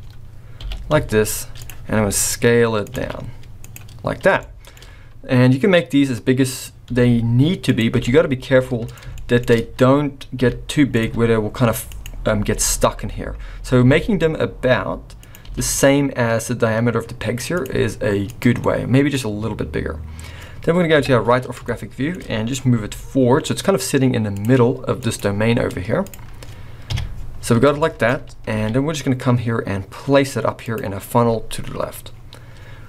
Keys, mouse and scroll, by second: 0.6 g, 1.9 s, 2.9 alt+a, 3.6 click, 4.3 shift+scroll up 1, 4.5 shift+middle click, 6.1-6.6 scroll up 1, 6.9 s, 7.9 g, 9.1 shift+middle click, 9.5-10.4 scroll up 3, 10.4 g, 11.0 s, 12.6 g, 15.5 g, 17.7 s, 18.5 scroll down 1, 18.7 middle click, 19.2-19.7 scroll down 2, 20.9 KP_3, 21.7 shift+middle click, 22.4-22.7 scroll up 1, 22.7 g, 25.0 click, 25.5-26.0 scroll down 2, 26.0 click, 26.8 KP_1, 27.8 shift+middle click, 28.5 g, 31.0-31.6 scroll down 5, 32.1-32.8 scroll up 4.